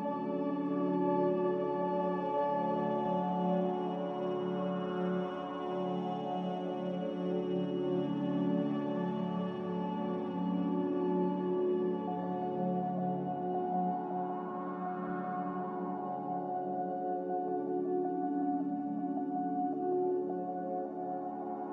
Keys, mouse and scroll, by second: 14.8 Delete, 15.2 Delete, 18.8 z.